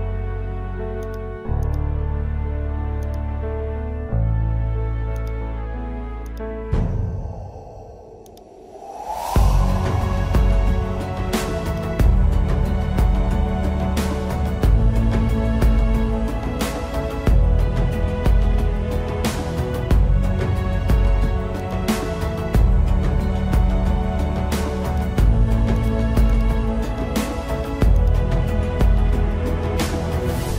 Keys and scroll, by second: 10.6 ctrl+-, 19.9 space, 21.3 space.